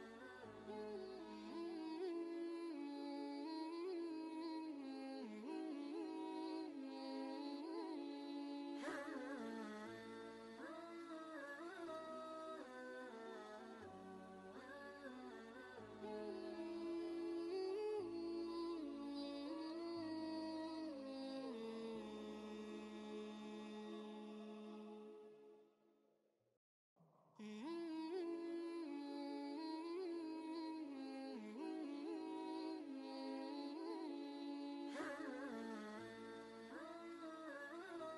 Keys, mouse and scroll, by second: 0.0 ctrl+space, 0.1 ctrl+click, 0.5 ctrl+space, 2.1-6.6 alt+shift+drag, 6.6 ctrl+space, 6.8 ctrl+click, 7.2 ctrl+space, 7.4 click, 8.0 ctrl+space, 8.1 ctrl+click, 8.6 ctrl+space, 9.3 click, 9.7 space, 12.2 click, 14.4 ctrl+a, 16.7 typing, 18.8 typing, 20.6-22.6 typing, 23.6 Down, 24.2 Return, 26.1 scroll down 1, 26.4 typing, 30.6 scroll up 1, 31.3 click, 33.9 right click, 34.8 click, 34.8 typing, 35.9 typing, 36.2 alt+Tab, 37.3 ctrl+v.